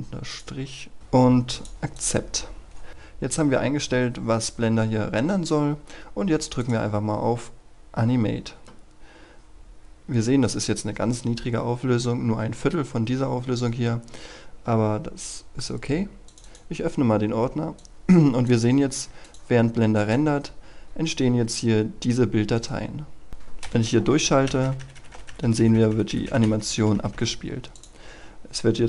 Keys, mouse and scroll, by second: 0.2 click, 2.8 scroll down 1, 4.3-6.5 scroll up 1, 6.5 click, 8.7 scroll up 1, 16.1 click, 22.4 right click, 23.2 click, 24.0 Right, 24.3-25.1 typing, 27.6-28.8 drag.